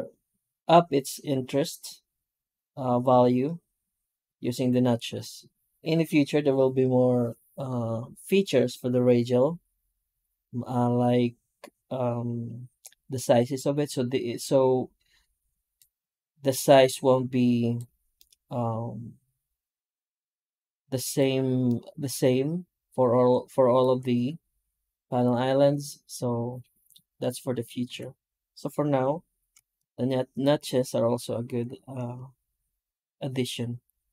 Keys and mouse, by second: 18.1-19.6 middle drag, 20.0-21.0 middle drag, 21.0 middle click, 21.6-22.8 middle drag, 23.2-23.7 middle drag, 27.7 F9.